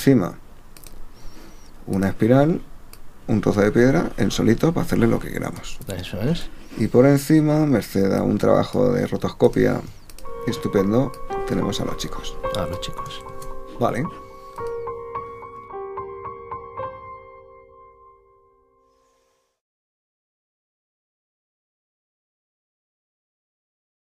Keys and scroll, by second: 6.1 super+z, 13.3 super+z.